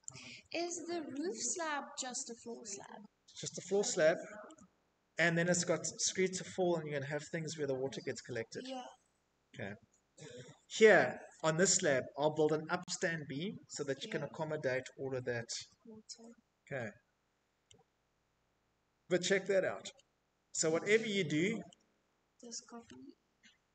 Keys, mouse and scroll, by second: 0.5 Tab, 1.8 shift+click, 2.3 shift+click, 7.7-8.3 scroll, 8.3 Escape, 14.2 scroll, 16.6-17.5 shift+scroll, 18.3 shift+middle click, 19.0 shift+middle click, 19.3 middle click, 19.3 middle click, 19.3 middle click, 20.1 middle click, 20.2 middle click, 21.7 middle click, 21.8 shift+click, 23.3 Tab.